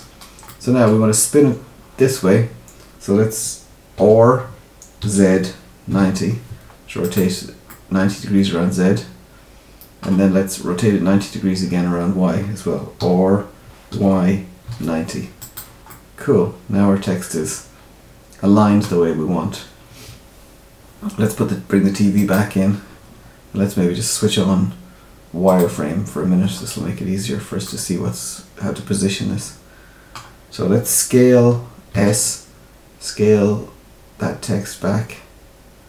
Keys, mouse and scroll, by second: 0.4 middle click, 3.9 r, 7.6 middle click, 12.9 r, 15.8 middle click, 19.1-22.1 scroll down 2, 22.1 click, 25.4 click, 26.3-27.6 scroll up 4, 27.6 middle click, 31.9 s.